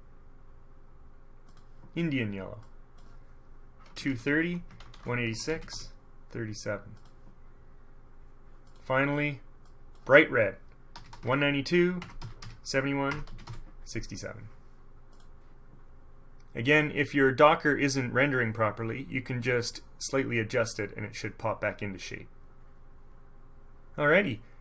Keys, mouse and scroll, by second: 1.6 scroll up 1, 2.8 middle click, 4.0-5.8 typing, 4.5 Tab, 5.4 Tab, 7.1 click, 8.8 click, 9.8 click, 11.1-13.6 typing, 12.1 Tab, 13.2 Tab, 15.3 click, 20.2 click.